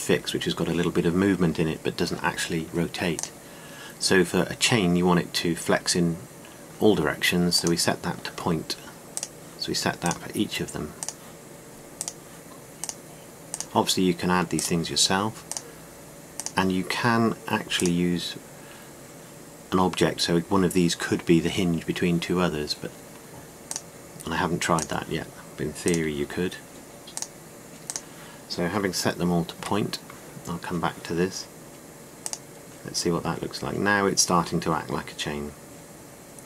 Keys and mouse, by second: 4.0-7.5 drag, 10.0-12.7 drag, 12.9 click, 17.8 click, 30.4 a, 33.1 click.